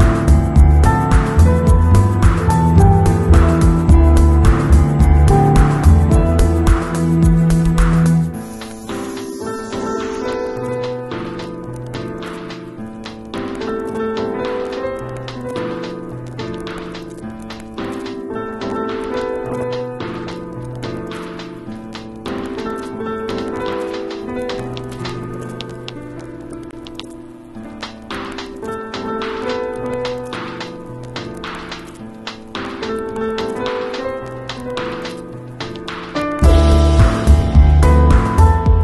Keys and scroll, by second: 0.3 x, 3.5 [, 10.2 v, 11.8 z, 13.6 v, 20.6 z, 24.4 shift+super+g, 25.8 shift+Left, 29.1 v, 29.6 shift+Left, 30.7 shift+Down, 31.2 shift+Left, 33.6 shift+Right, 38.6 b.